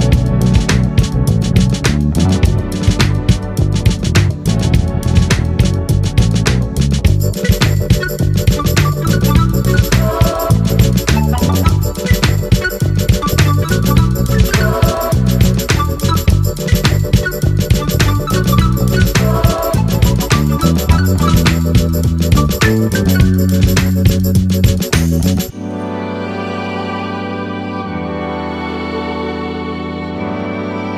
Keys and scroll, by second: 19.8 ctrl+a.